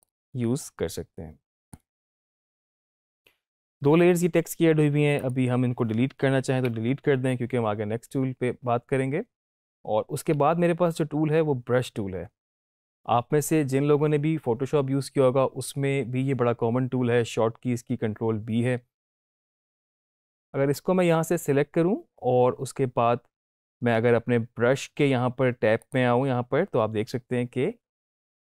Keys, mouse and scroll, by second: 0.0-5.1 drag, 19.2 click, 25.7 click.